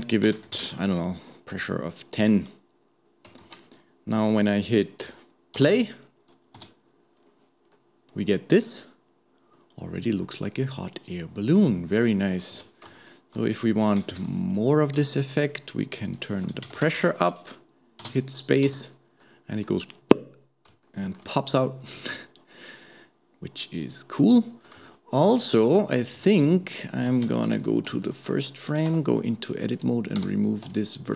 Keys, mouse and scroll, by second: 3.5 ctrl+s, 5.0 click, 5.6 space, 6.6 space, 7.2-7.7 scroll down 2, 7.7-10.8 middle drag, 12.5 KP_1, 13.1-14.1 shift+middle drag, 14.1 shift+Left, 14.5-15.1 scroll up 1, 15.1 shift+middle click, 16.1-18.0 drag, 18.0 space, 18.7 space, 19.2-24.4 middle drag, 24.9-26.1 shift+middle drag, 26.1 KP_1, 27.5 shift+Left, 28.0 shift+middle click, 28.9 Tab, 29.7 click.